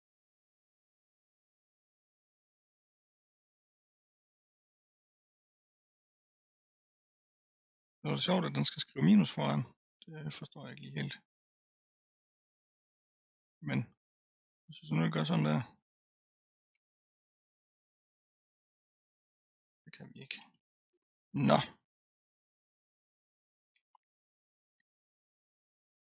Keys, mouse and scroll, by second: 11.4-12.2 scroll down 2, 12.2-13.0 scroll up 3, 13.0-14.6 middle drag, 14.6 click, 16.7 1, 18.1 click, 20.2 ctrl+z, 20.4 ctrl+z, 21.0-21.4 scroll up 2, 21.4 middle click, 22.0-22.9 scroll down 4, 22.9-23.7 scroll up 1, 23.7 g.